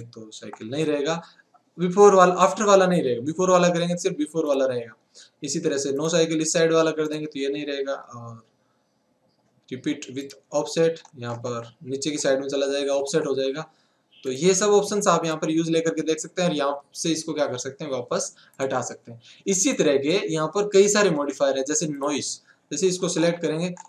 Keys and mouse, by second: 6.0-10.3 drag, 15.3-22.0 drag.